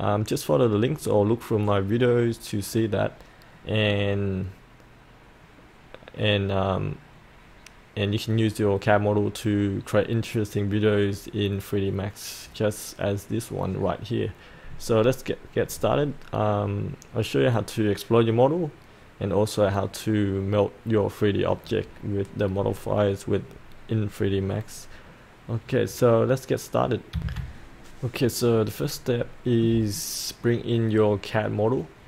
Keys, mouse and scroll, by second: 27.1 F8, 28.8 middle click, 29.9-32.0 alt+middle drag.